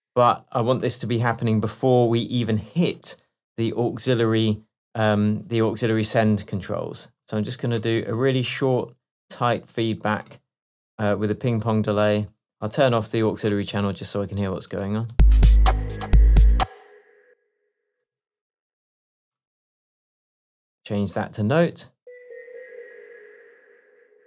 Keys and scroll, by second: 15.2 space, 16.6 space, 21.8 space.